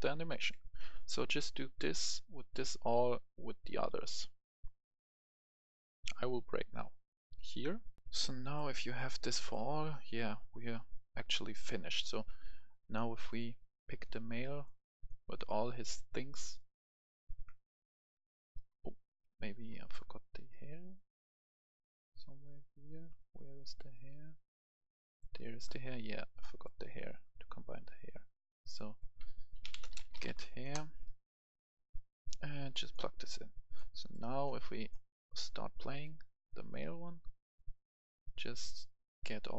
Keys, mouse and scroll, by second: 0.1 d, 0.4 Escape, 0.8 right click, 8.0 F10, 8.3 right click, 9.6 scroll down 1, 9.9 right click, 11.9 click, 15.2 click, 19.0 Escape, 19.7 right click, 20.2 scroll up 1, 20.4-23.8 right drag, 23.9 click, 25.3 right click, 28.6-29.8 drag, 29.5-30.2 typing, 30.6 Return, 31.6-39.5 drag.